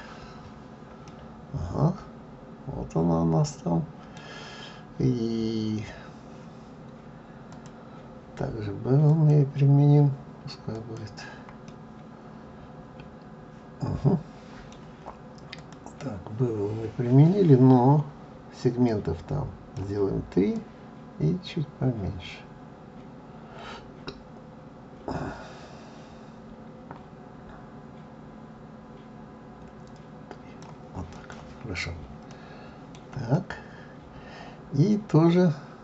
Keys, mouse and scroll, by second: 1.0 middle click, 7.5 click, 11.7 middle click, 15.6 click, 18.8 click, 20.5 click, 32.3 middle click.